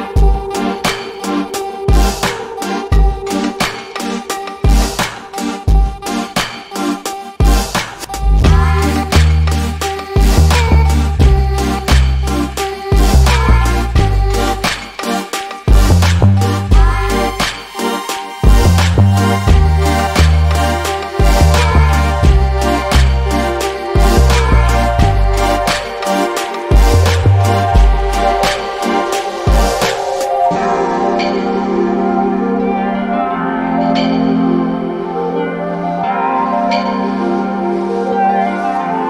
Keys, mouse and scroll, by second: 3.4 click, 15.8-16.2 scroll down 1, 16.2 click, 17.7 double click, 18.2 scroll down 1, 18.4 alt+click, 19.2 n, 19.4 a, 20.1 scroll up 1, 20.4 alt+click, 21.0-21.7 scroll up 1, 21.7 alt+click, 24.4 double click, 24.7 scroll down 1, 25.7 scroll down 1, 25.7 alt+click, 30.9 scroll up 1, 31.7 alt+click, 33.5 alt+middle click, 34.6 click.